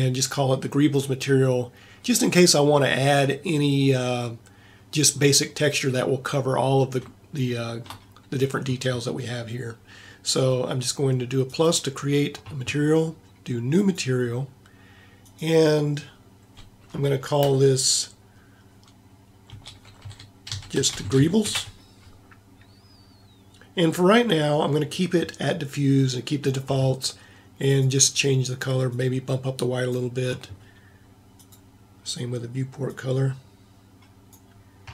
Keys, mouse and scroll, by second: 3.6 middle click, 4.8-5.9 middle drag.